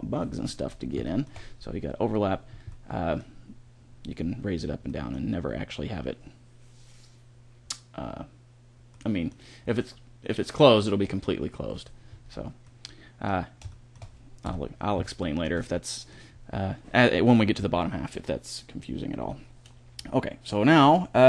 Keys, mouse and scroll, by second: 11.9-14.3 middle drag, 14.3 KP_1.